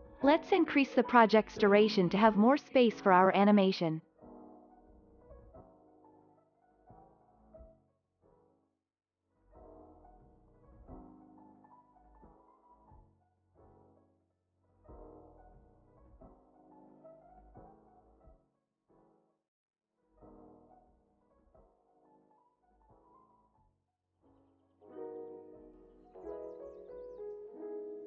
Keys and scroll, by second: 1.8 Right, 2.1 BackSpace, 2.6 2, 3.0 Return, 7.0 ctrl+a, 8.0 alt+], 17.1 ctrl+c, 22.7 ctrl+s.